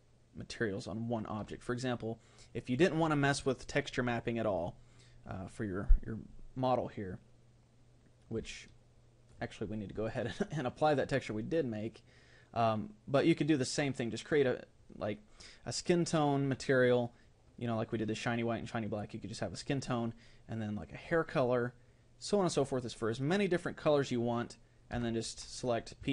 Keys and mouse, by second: 1.8-5.4 right drag, 8.5-13.2 middle drag, 24.9 Tab.